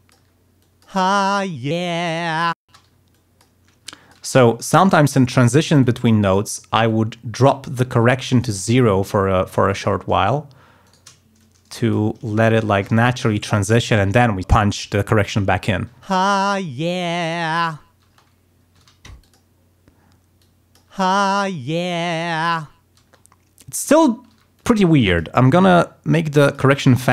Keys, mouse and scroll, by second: 0.6 alt+click, 0.9 space, 2.6 space, 3.1 alt+click, 3.8 alt+click, 4.4 alt+d, 4.8 alt+click, 5.2 alt+click, 5.8 alt+click, 6.8-8.1 drag, 8.3 click, 8.6-9.9 drag, 10.8 shift+right click, 11.3 shift+click, 12.4 shift+right click, 13.1 shift+click, 15.9 space, 18.0 space, 18.7 d, 19.2 click, 20.3 click, 20.9 space, 23.0 space, 24.3 d, 24.5 click, 25.0 click, 25.7-26.7 drag, 27.0 click.